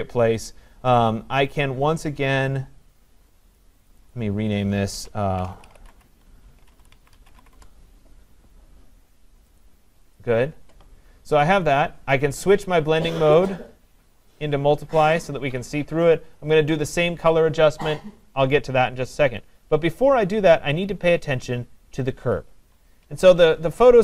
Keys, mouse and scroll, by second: 3.9 click, 4.1 click, 5.5-7.4 typing, 7.6 Return, 9.6 click, 10.2 click, 10.2-10.9 typing, 13.6 click, 16.1 click, 22.7 click, 23.0 ctrl+=, 23.6 ctrl+=.